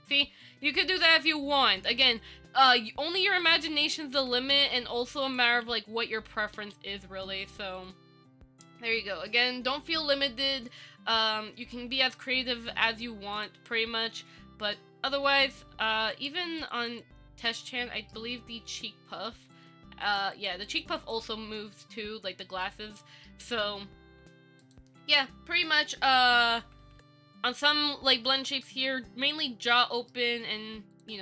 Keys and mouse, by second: 1.1 shift+middle click, 3.4-3.8 shift+middle drag, 3.9 space, 5.4 click, 5.9 ctrl+z, 6.3 ctrl+z, 6.8 space, 8.0 click, 8.9 Tab, 16.3 click, 16.8 click, 17.7 middle click, 19.8 click, 20.2 click, 20.9 click, 22.8 middle click, 24.8 click, 26.1-30.0 Up, 30.0-30.3 middle drag.